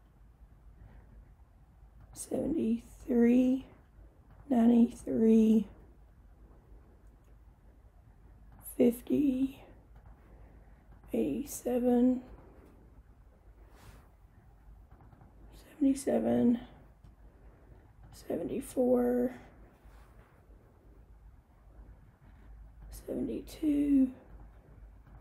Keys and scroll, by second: 2.1 7, 3.1 3, 3.7 Return, 4.4 9, 5.1 3, 5.6 Return, 8.6 5, 9.4 0, 10.1 Return, 11.0 8, 11.5 7, 12.4 Return, 15.0 7, 15.2 7, 16.6 Return, 18.1 7, 18.7 4, 19.3 Return, 22.9 7, 23.6 2, 24.4 Return, 25.1 8.